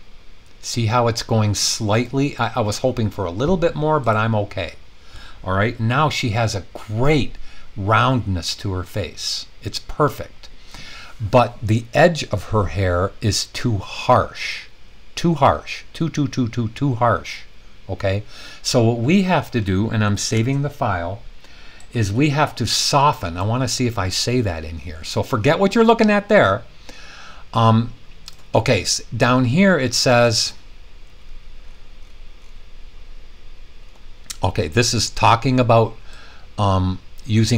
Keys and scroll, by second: 20.3 super+s.